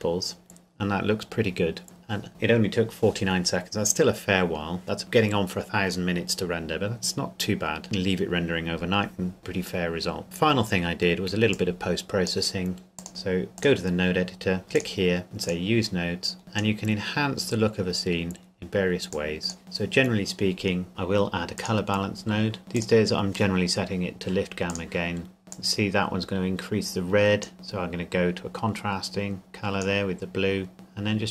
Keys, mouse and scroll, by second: 0.7 scroll up 1, 1.8-2.2 scroll down 1, 11.5 click, 14.2-14.8 scroll up 1, 14.8 click, 17.0 scroll down 1, 18.2-19.1 scroll up 1, 19.1 click, 22.6 middle click, 22.8 click.